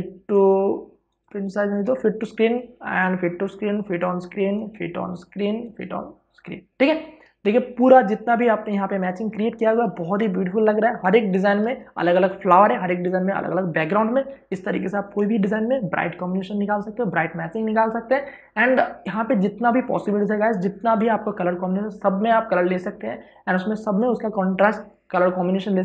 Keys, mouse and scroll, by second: 0.1 click, 0.8 right click, 1.6 click, 2.2 right click, 2.9 click, 3.3 right click, 4.0 click, 4.3 right click, 5.1 click, 5.4 right click, 6.1 click, 8.8 click, 9.0 ctrl+space, 9.7 ctrl+alt+shift+click, 20.3 click.